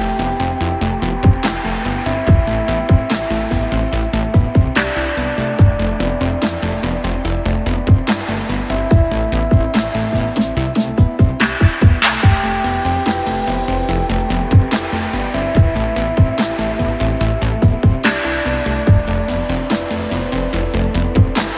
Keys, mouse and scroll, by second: 0.2 scroll up 2, 0.6 alt+middle click, 0.9 alt+middle click, 1.5 click, 2.2 alt+click, 2.6 alt+click, 3.0 scroll down 2, 3.4 shift+right click, 4.3 click, 4.8 alt+middle click, 5.6 click, 5.9 scroll up 1, 6.2 alt+click, 6.5 scroll up 1, 6.8 alt+middle click, 7.1 alt+click, 7.4 alt+middle click, 7.8-8.4 scroll down 3, 8.7 click, 9.2 click, 9.6 shift+right click, 10.5-11.0 scroll down 5, 11.1 alt+middle click, 11.4 scroll down 2, 11.7 alt+click, 12.9 alt+click, 14.5-18.0 drag, 18.6 click.